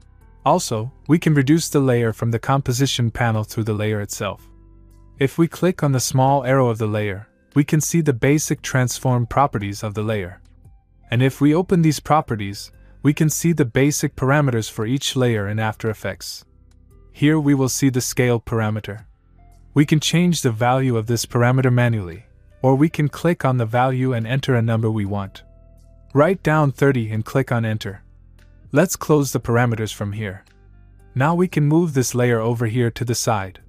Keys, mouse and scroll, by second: 2.7 click, 5.5 click, 16.7 click, 17.9 click, 19.4-24.0 click, 23.0 click, 32.1-33.6 click, 33.1 click.